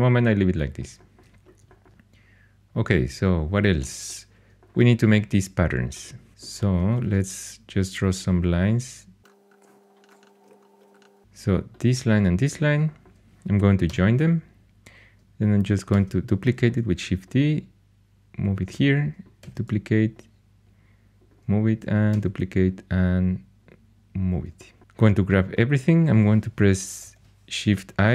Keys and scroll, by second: 7.0 shift+a, 10.4 alt+x, 10.8 2, 13.8 j, 15.9 shift+d, 19.4 shift+d, 22.1 shift+d, 27.0 shift+i.